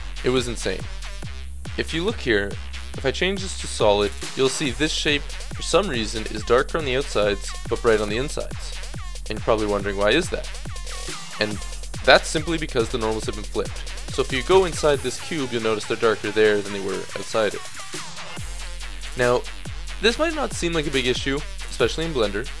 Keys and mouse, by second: 0.0-0.9 middle drag, 0.9 t, 4.4-5.8 drag, 6.4-8.4 middle drag, 8.9-14.3 middle drag, 16.1-17.2 middle drag, 17.4 middle click, 18.6 middle click, 18.9-22.6 middle drag.